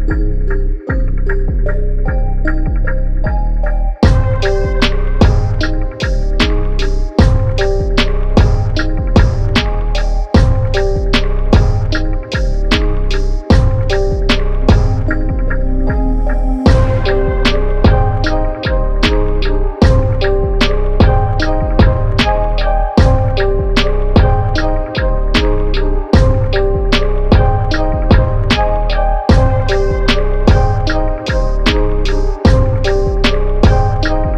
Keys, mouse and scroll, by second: 0.0 s, 1.1 e, 1.9 e, 2.6 s, 4.4 Tab, 4.7-5.8 scroll down 4, 5.8-7.0 scroll up 1, 7.0-7.4 scroll up 3, 7.4 Tab, 8.5 click, 9.6 click, 11.9 g, 15.0 e, 16.3 s, 17.2 Tab, 17.7 click, 18.4-19.2 scroll down 6, 19.2 scroll up 2, 19.8 shift+middle click, 19.9 scroll up 1, 20.2 click, 20.9 click, 22.7 click, 23.9-25.1 drag, 26.7-28.0 drag, 28.6 click, 29.8 click, 30.3-30.9 scroll up 1, 30.9 g.